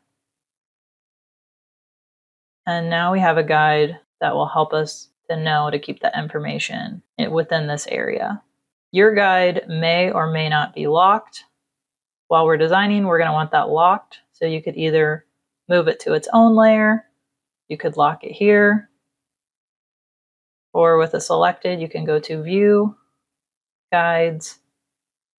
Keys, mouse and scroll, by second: 0.2 click, 0.7 click, 2.3 click, 8.7 click, 17.2 click, 18.2 click, 19.6 click, 20.2 click, 21.9 click.